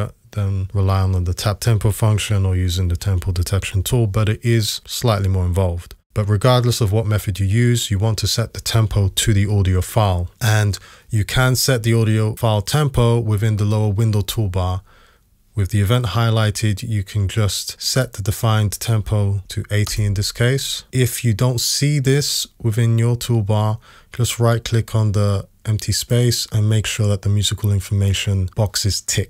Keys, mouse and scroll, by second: 19.4 typing, 19.9 Return.